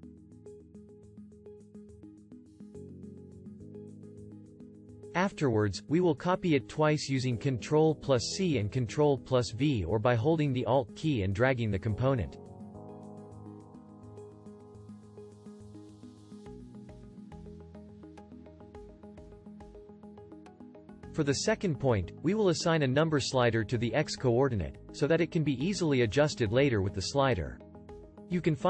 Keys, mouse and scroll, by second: 7.6 ctrl+c, 9.0 ctrl+v, 10.6-15.4 alt+drag.